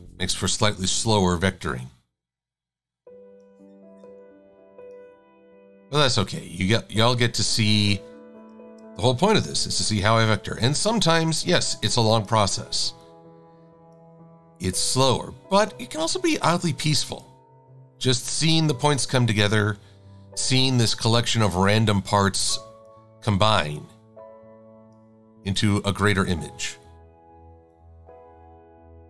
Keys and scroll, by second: 8.7 shift+x.